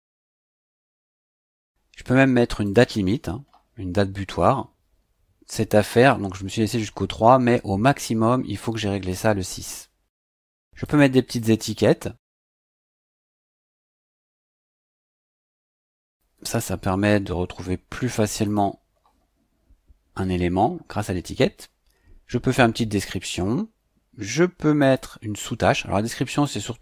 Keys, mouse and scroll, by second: 1.3 click, 2.6 click, 9.1 click, 10.8 click, 11.4 click, 14.7-17.1 typing, 18.4 click, 24.8 click, 26.3 click.